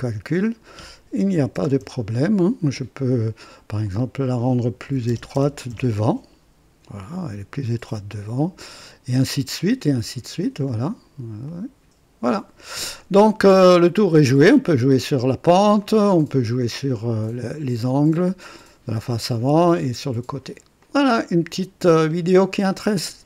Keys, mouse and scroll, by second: 0.2 click, 1.3 KP_1, 1.5 KP_0, 1.7 KP_Enter, 3.8 click, 4.8 KP_2, 5.0 KP_0, 5.3 KP_0, 5.6 Return, 6.9 click, 7.8-9.0 drag, 9.0 typing, 10.6 click, 11.4 click, 12.9-14.6 drag, 14.4 typing, 15.8-18.8 drag, 19.6 click, 20.5-21.3 typing, 20.8-21.5 drag, 21.9 scroll up 2, 22.7 right click.